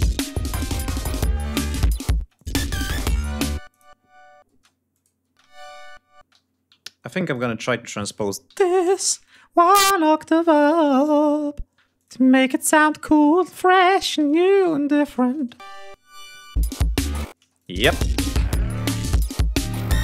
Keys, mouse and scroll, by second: 1.0 scroll down 2, 1.8 space, 1.9 click, 3.3 click, 4.1 space, 4.5 click, 4.9 space, 5.2 ctrl+scroll up 2, 5.8 ctrl+space, 6.1 e, 6.3 ctrl+scroll down 2, 6.8 ctrl+click, 7.5 click, 8.0 g, 8.1 shift+click, 8.4 shift+click, 8.7 shift+right click, 11.5 click, 13.2 scroll up 2, 13.7 click, 15.0 click, 15.0 space, 16.1 click, 16.9 space, 17.1 click, 17.6-17.9 scroll down 2, 18.3 ctrl+scroll up 2, 18.7 ctrl+scroll down 2, 19.0 ctrl+scroll up 2.